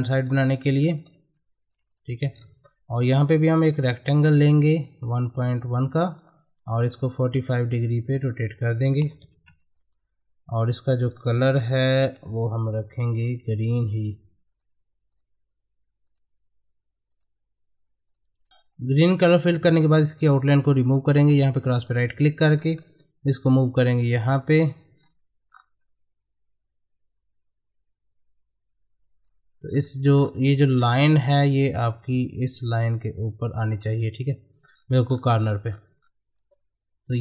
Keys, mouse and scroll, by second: 0.2 right click, 0.6 middle click, 1.1 click, 2.3-3.0 scroll up 1, 3.4 click, 3.8-5.1 ctrl+drag, 11.1-12.0 scroll up 1, 12.0 g, 12.6 ctrl+click, 12.7-14.5 ctrl+drag, 18.5 ctrl+z, 18.6 click, 21.8 right click, 22.5 scroll up 1, 22.8-25.0 drag, 25.0-25.8 scroll up 1, 25.8-29.7 drag, 29.7-31.8 scroll up 1, 31.9-34.7 drag, 34.7-36.4 scroll down 1, 36.4 middle click.